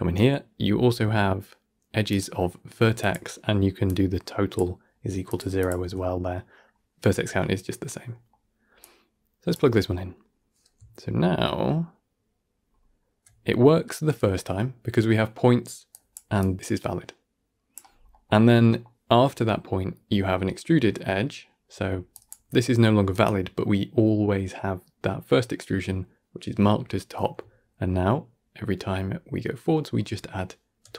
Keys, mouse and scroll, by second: 3.7-5.7 drag, 5.7 x, 6.1-8.7 middle drag, 8.7-10.0 drag, 10.0-10.8 scroll down 4, 10.8-11.6 alt+scroll up 1, 12.4 alt+scroll up 1, 13.3 scroll down 2, 13.5-15.8 middle drag, 15.8 click, 17.8 scroll down 1, 18.0-22.0 middle drag, 22.0-28.0 drag, 28.0 alt+scroll up 1, 28.7-29.2 alt+scroll down 1.